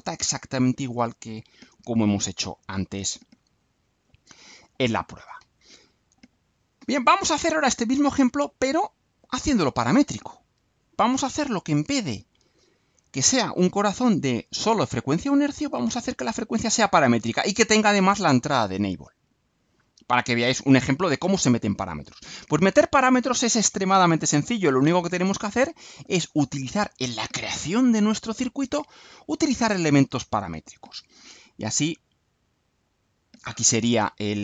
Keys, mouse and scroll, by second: 19.9-21.8 drag, 32.6 click.